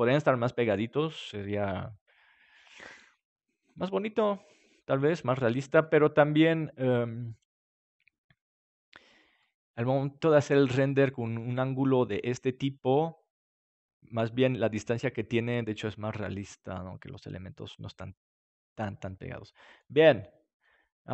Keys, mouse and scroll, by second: 5.3-7.9 middle drag.